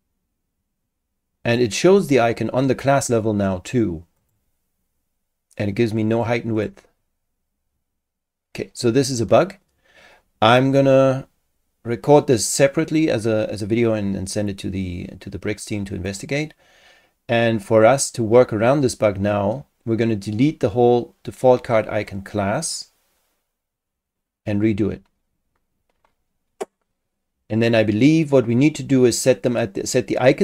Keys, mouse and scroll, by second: 4.2 click, 6.1 click, 6.5 click, 16.1 click.